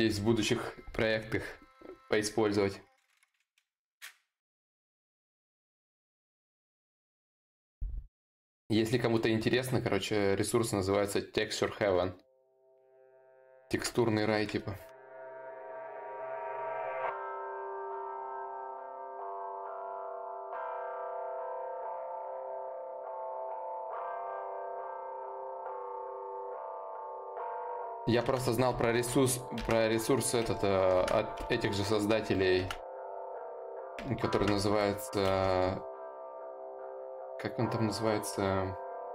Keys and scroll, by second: 17.4 d, 23.9 ctrl+z, 24.3 ctrl+z, 34.9 ctrl+z, 34.9 y.